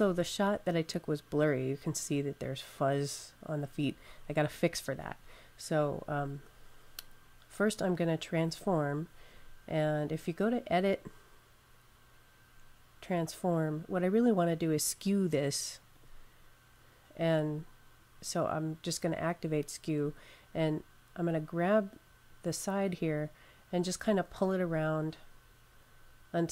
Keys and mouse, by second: 10.0 click, 15.8 click, 22.8 click.